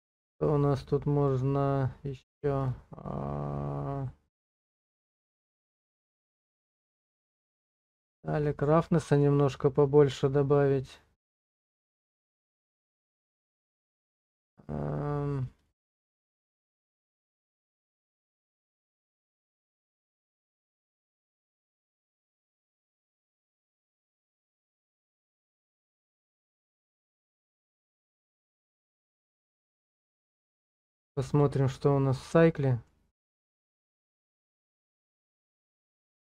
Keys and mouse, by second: 0.2 click, 2.2 click, 4.4 click, 6.9 click, 8.4-12.0 drag, 13.0 click, 13.5 click, 15.7 click, 18.0 click, 24.7 click, 26.9-28.8 drag, 29.4 middle click, 29.8 shift+middle click, 30.1 middle click, 32.4 middle click.